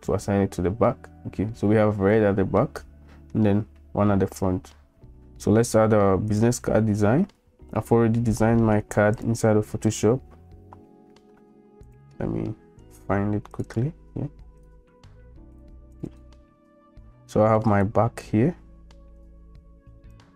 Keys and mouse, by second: 2.7 middle click, 6.3 click.